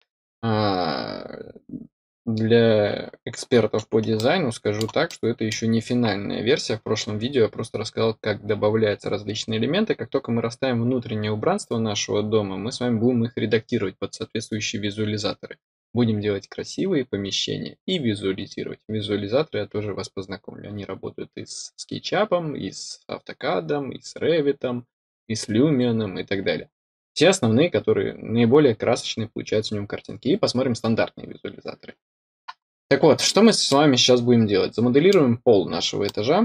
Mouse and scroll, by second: 4.1-4.7 middle drag, 5.0-5.4 middle drag, 6.0-7.3 scroll up 2, 7.3-32.0 scroll up 1, 32.6-33.6 scroll down 2, 33.6-35.0 middle drag, 35.4 scroll up 2, 36.0-36.4 middle drag.